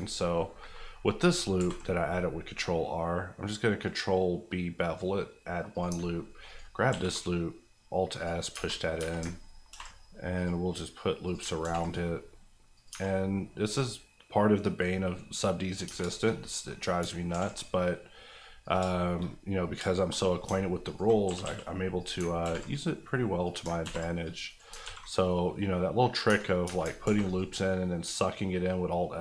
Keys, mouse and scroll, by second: 1.5 ctrl+b, 3.2-4.2 scroll up 1, 5.7 click, 5.9 alt+click, 6.9 alt+s, 8.2 click, 8.5 Tab, 9.7 ctrl+r, 10.3 click, 11.5 ctrl+click, 11.6 ctrl+r, 11.8 ctrl+click, 11.8 click, 12.9 Tab, 13.1 scroll down 1, 13.7-15.8 middle drag, 15.8 Tab, 16.0 shift+middle click, 16.3 scroll up 1, 16.5 middle click, 17.1 ctrl+scroll up 1, 17.3 ctrl+r, 17.5 click, 18.8 shift+click, 19.0 shift+middle click, 19.2 middle click, 19.4-20.8 scroll up 4, 20.1 shift+middle click, 20.8 alt+click, 21.2 click, 21.2 g, 21.4 g, 21.9 click, 22.2 ctrl+click, 22.4 ctrl+r, 22.6 ctrl+click, 23.4 click, 23.7 ctrl+click, 23.8 ctrl+r, 24.2 click, 24.5 right click, 24.7 alt+right click, 24.8 alt+s, 26.1 click, 26.2 Tab, 27.0 ctrl+r, 27.3 click.